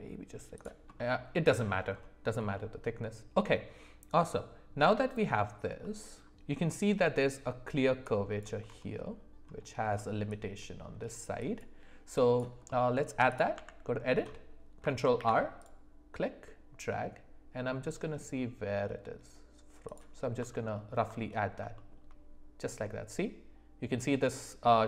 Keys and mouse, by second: 0.9-1.6 middle drag, 2.5-4.2 middle drag, 4.9-5.2 shift+middle drag, 5.8 middle click, 12.2 click, 12.6 middle click, 13.5 Tab, 15.1 ctrl+r, 20.7 alt+middle click, 21.7 shift+middle click.